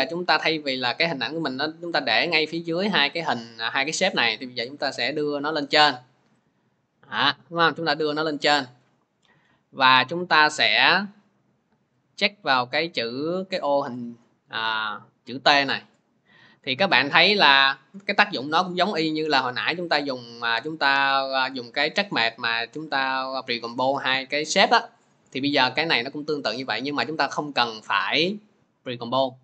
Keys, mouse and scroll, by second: 0.8 click, 2.2 click, 2.8 click, 3.5 click, 3.8 click, 6.2 click, 7.9 scroll, 13.5 click, 19.4 click, 21.0 click, 21.4 click, 22.7 click, 23.7 click, 25.9 click.